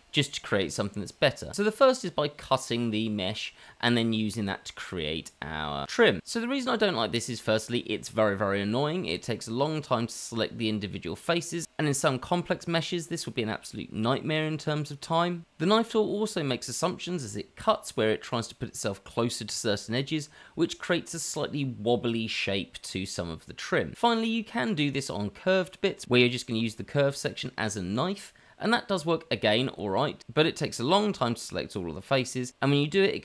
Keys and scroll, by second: 0.0 c, 3.2 c, 4.0 shift+z, 4.8 shift+z, 5.6 c, 9.3 c, 11.5 c, 13.9 q, 14.7 q, 16.4 Tab, 21.7 shift+d, 22.1 s, 23.0 g, 24.6 q, 25.9 h, 26.0 Tab, 26.8 Tab, 27.6 c, 28.4 c, 28.4 shift+z, 28.8 c.